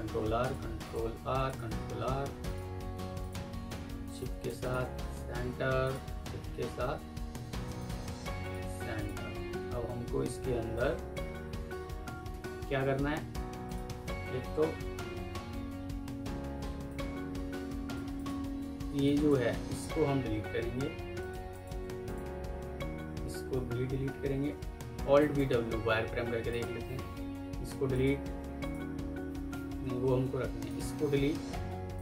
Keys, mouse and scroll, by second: 0.7 double click, 1.0 ctrl+r, 1.3 ctrl+click, 1.5 ctrl+r, 3.5 double click, 3.9 ctrl+right click, 4.5 shift+click, 5.1 Escape, 6.5 ctrl+c, 7.2 ctrl+v, 7.6 shift+click, 7.8 typing, 10.1 F2, 11.2 Escape, 14.7 ctrl+u, 15.2 Escape, 16.8 alt+click, 19.7 ctrl+z, 20.6 Delete, 21.4 ctrl+click, 24.0 Delete, 25.1 alt+v, 25.3 w, 27.7 w, 29.7 typing, 30.3 Escape, 31.4 Delete.